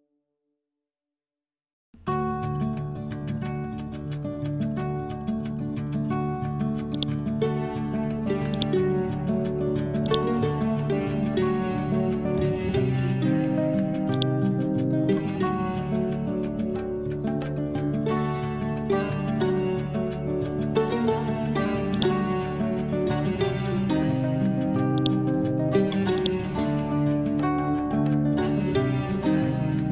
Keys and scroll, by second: 0.6 F12, 5.0 Return.